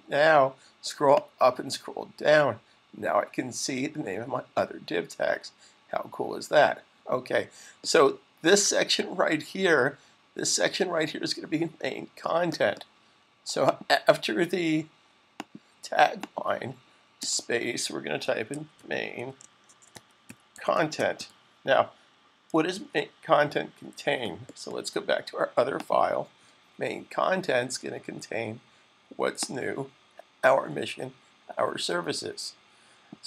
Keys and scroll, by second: 17.8-21.6 typing, 22.6 super+s.